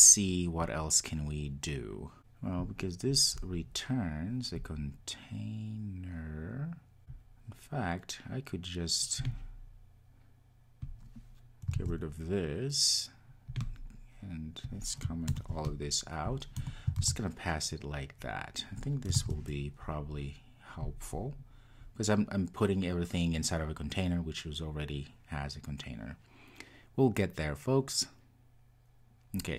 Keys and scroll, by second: 11.8 super+x, 15.3 super+/, 19.1 super+v, 19.2 super+s, 20.9 ctrl+r.